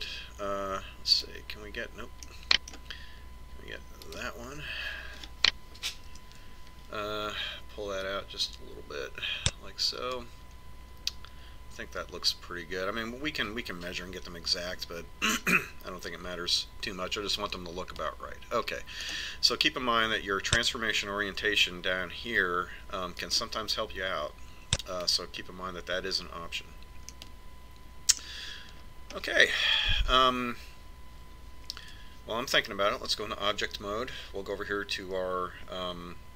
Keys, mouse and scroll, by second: 2.4 right click, 3.5 click, 3.6-5.3 middle drag, 5.4 right click, 7.5 ctrl+KP_7, 9.4-10.6 drag, 11.0 click, 20.4 click, 28.6-30.4 middle drag, 30.7-32.7 middle drag, 33.4 Tab.